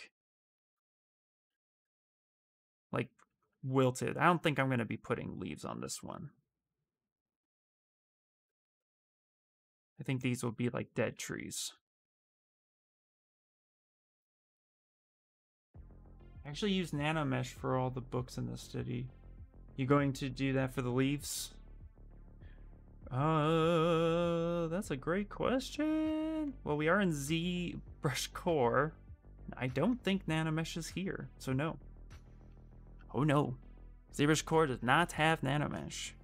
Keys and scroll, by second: 0.3 ctrl+z, 0.8 s, 5.5 ctrl+z, 5.8 ctrl+z, 13.5 d, 13.7 d.